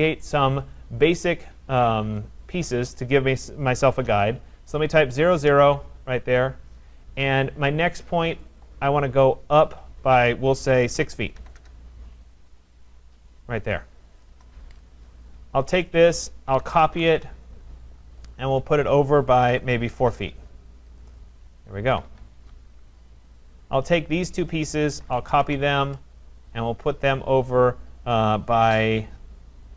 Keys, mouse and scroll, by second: 0.8 click, 3.5-4.6 typing, 5.4 Return, 8.4 click, 8.6 click, 9.2 scroll, 11.0-11.6 typing, 12.4-12.7 scroll, 13.3 click, 14.3 Return, 14.4 Return, 15.9 click, 16.4-17.4 typing, 18.3 click, 19.4-19.9 typing, 20.0 Return, 21.0 click, 21.3 scroll, 21.9 Escape, 22.1 Escape, 22.1 typing, 23.4 click, 24.3 click, 24.7-25.7 typing, 26.3 Return, 26.6 click.